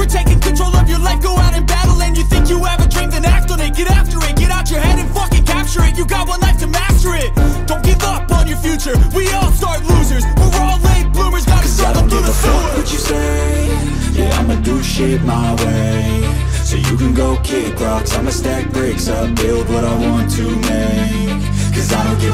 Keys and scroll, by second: 15.6 ctrl+i.